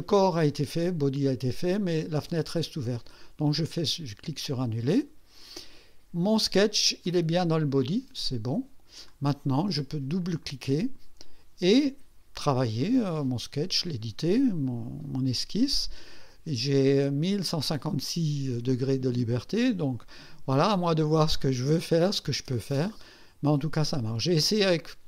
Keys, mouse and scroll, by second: 0.9 scroll down 1, 2.0 click, 3.1 click, 4.9 click, 7.0 click, 8.4 click, 9.0-9.3 scroll down 2, 10.2 click, 13.2 scroll up 2, 19.4-19.9 scroll up 4, 21.9-22.8 scroll down 4.